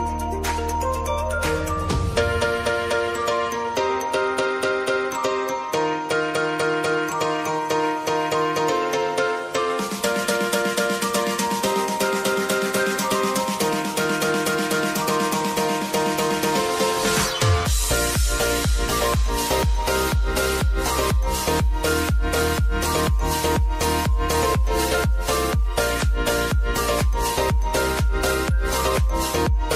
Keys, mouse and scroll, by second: 0.1 space, 1.3 click, 1.8 space, 4.7 space, 5.2 s, 5.9-11.4 drag, 11.4-14.5 drag, 14.5 Up, 15.8-22.0 drag, 22.0 s, 23.3 m, 25.4-29.7 drag.